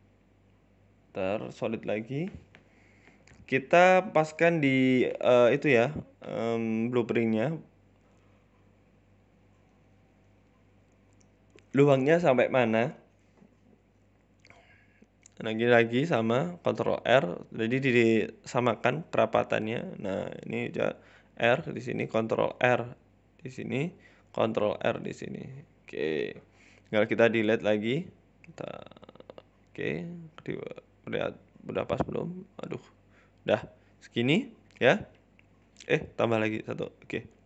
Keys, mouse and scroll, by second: 0.1 Tab, 0.1 scroll up 9, 0.3 z, 0.8 shift+middle click, 2.3 click, 2.8 c, 9.1 middle click, 10.1 scroll down 2, 10.3 middle click, 29.5 middle click, 31.4 shift+right click, 32.3 ctrl+z, 32.4 middle click, 32.9 shift+right click, 33.1 middle click, 34.4 shift+right click, 34.9 middle click, 35.9 shift+right click, 36.2 middle click.